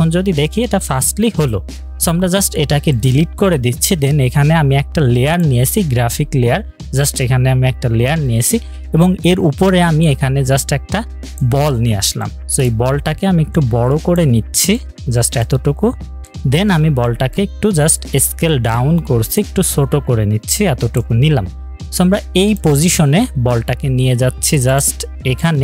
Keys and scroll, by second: 3.2 Delete.